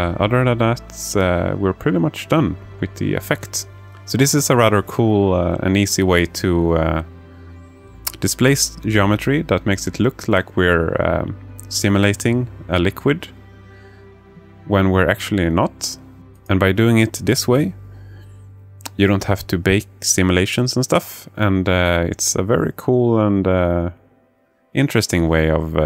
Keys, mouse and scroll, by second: 2.0 alt+shift+middle click, 2.5 alt+shift+middle click, 3.1 alt+shift+click, 3.7 alt+shift+middle click, 6.1-10.3 drag, 12.7-18.7 drag.